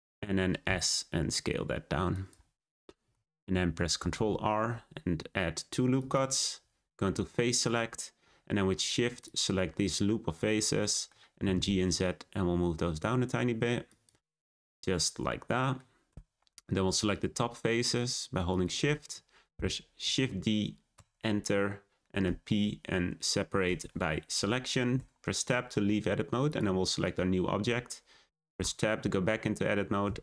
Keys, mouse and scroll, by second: 0.1 middle click, 0.6 s, 2.5-4.0 middle drag, 4.1 r, 7.6-9.1 drag, 9.2 click, 9.7-11.4 middle drag, 11.4 g, 14.4 Tab, 15.5-16.0 middle drag, 16.0 Tab, 17.0 click, 17.8 shift+click, 18.4 shift+click, 20.0 shift+d, 22.2 p, 24.9 Tab, 25.3 click, 26.4 click, 26.9 click, 28.5 Tab, 30.0 a.